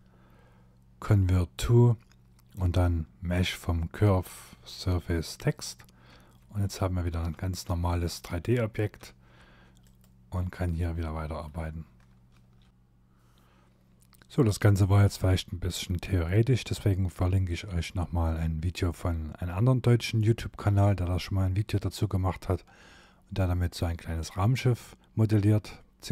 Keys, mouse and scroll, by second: 5.2 Tab, 5.7 middle click, 6.3 Tab, 6.6 Tab, 7.0 middle click, 8.0 Tab, 8.4 Tab, 8.8 click, 11.3 e.